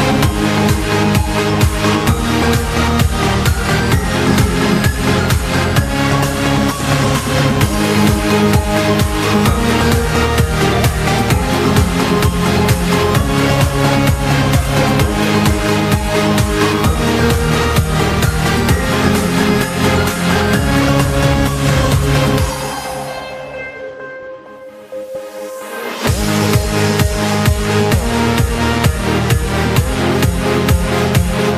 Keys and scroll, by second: 0.8 p, 11.5-13.3 typing, 21.0 z, 25.2 s.